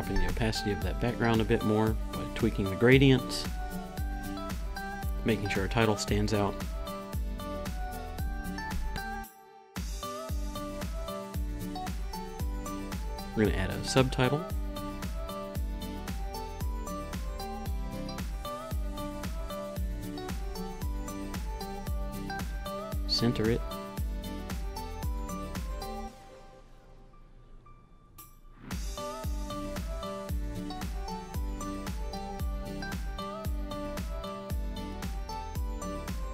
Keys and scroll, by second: 8.2 t, 9.3-18.6 typing, 20.6 Return, 21.5 Right, 21.7 BackSpace, 33.5 Up, 34.8 Up.